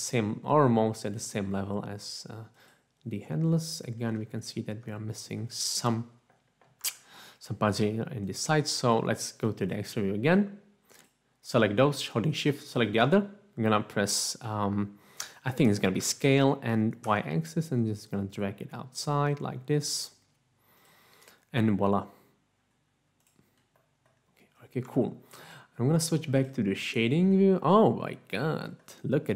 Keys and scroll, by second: 6.9 Tab, 16.0 s, 17.0 typing, 24.9 Tab.